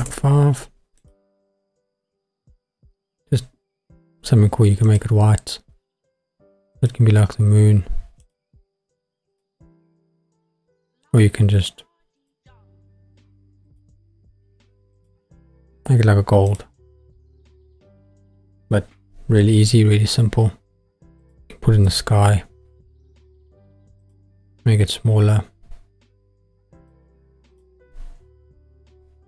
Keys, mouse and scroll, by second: 1.0 click, 4.8 click, 6.8 click, 9.3 click, 12.2 click, 13.6 click, 16.5 click, 21.2 click, 21.8 g, 24.0 click, 24.3 s, 26.8 click, 27.5 click.